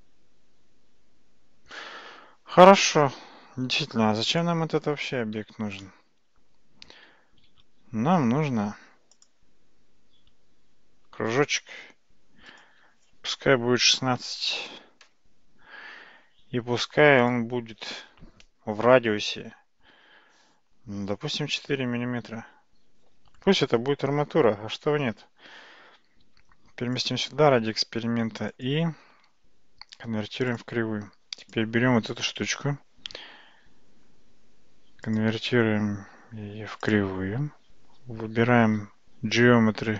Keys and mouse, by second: 4.3 click, 5.4 x, 7.5 shift+a, 12.5-16.1 drag, 17.2-23.5 drag, 26.2 g, 28.6-30.6 drag, 35.2-37.0 drag.